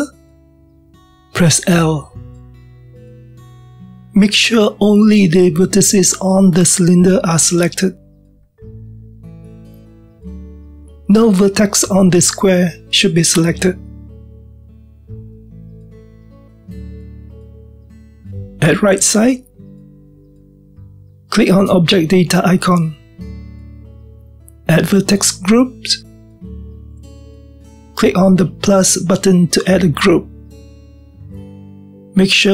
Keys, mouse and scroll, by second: 3.4 l, 4.5-6.1 scroll down 1, 6.1 l, 6.7-9.0 scroll down 1, 9.0-9.6 scroll down 1, 9.6 middle click, 10.2-10.5 scroll down 1, 10.5-20.7 middle drag, 24.2 click, 30.4-32.5 drag.